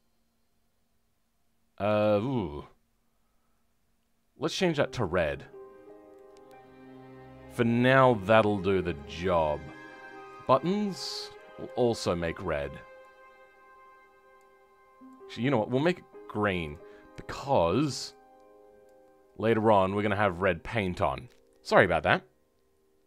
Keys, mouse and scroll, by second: 6.1 middle click, 11.3-19.8 drag, 19.8-20.1 scroll down 2, 20.1-23.0 middle drag, 20.7-23.0 drag.